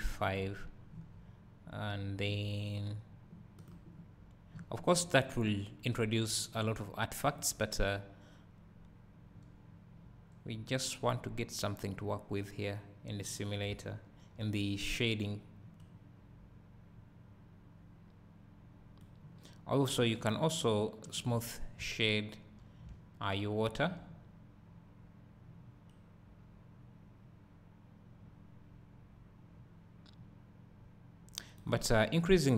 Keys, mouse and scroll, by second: 8.2-15.9 drag, 13.2-13.7 scroll down 2, 13.8 `, 15.9-32.5 right drag, 21.8 `.